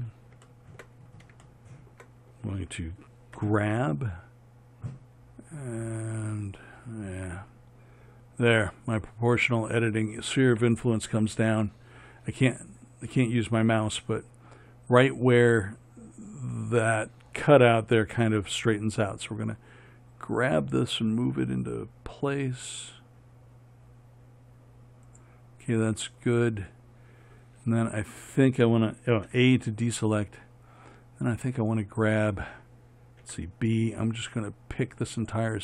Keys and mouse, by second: 3.6 g, 29.6 a, 33.5 b.